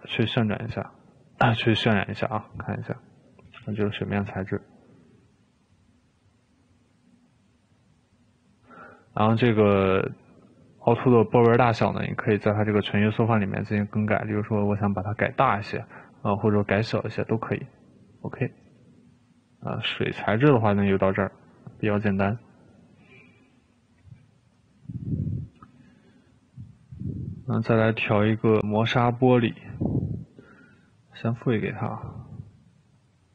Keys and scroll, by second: 13.7 2, 24.2 Escape.